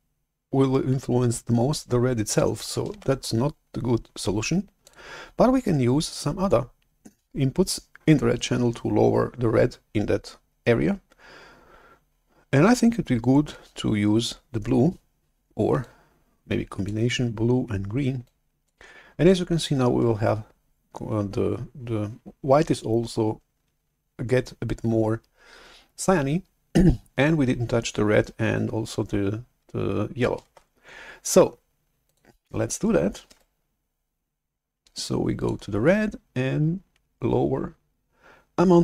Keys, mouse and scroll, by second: 3.0 shift+super+F11, 4.7 click, 15.9 click, 18.1 click, 19.0 click, 30.5 shift+super+F11, 31.9 click, 35.3 alt+Tab, 35.3 click.